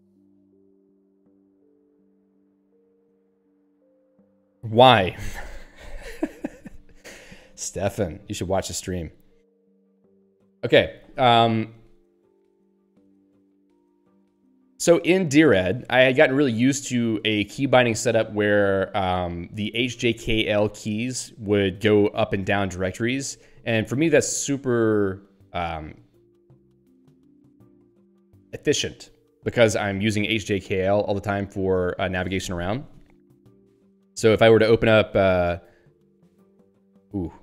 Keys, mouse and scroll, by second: 12.4 scroll up 1, 13.2 click, 16.0 Down, 21.6 Up, 26.4 Down, 34.4 super+e, 36.5 j.